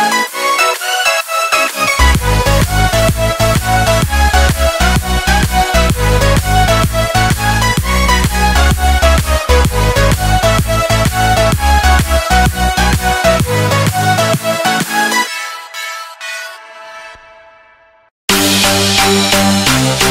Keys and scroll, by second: 9.4 Up.